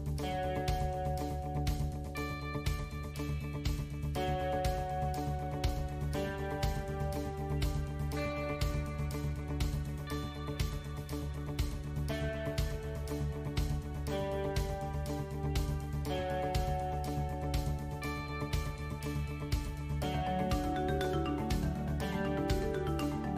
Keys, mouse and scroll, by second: 0.1 ctrl+r, 5.4 ctrl+b, 8.1 x, 11.9 KP_1, 13.0 KP_3, 13.9 a, 15.0 shift+space, 16.4 ctrl+click, 19.3 e, 22.8 click.